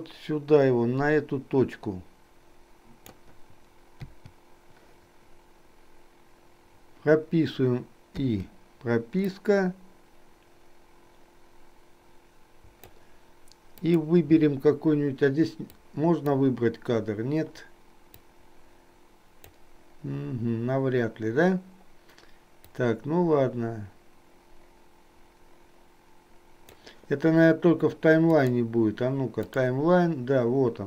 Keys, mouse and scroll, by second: 4.2 i, 8.3 i, 9.5-13.1 drag, 13.8 click, 15.7 click, 18.3-19.6 drag, 23.1-26.8 drag, 28.5-29.6 drag.